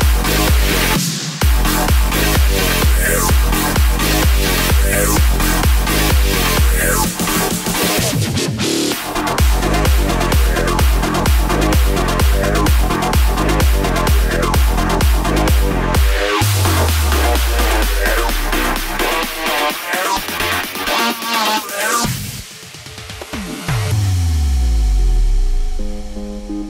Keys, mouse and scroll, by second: 2.2 KP_1, 11.0 space, 16.1 space, 16.7-18.6 middle drag, 18.6-20.6 drag, 20.6 space.